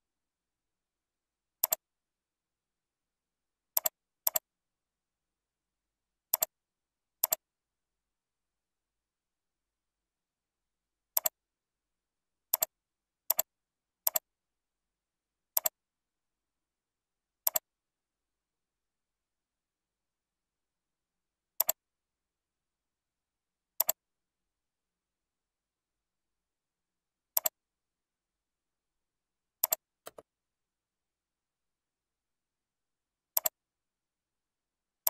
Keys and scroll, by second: 2.8 ctrl+b, 9.3 ctrl+b, 16.6 ctrl+b.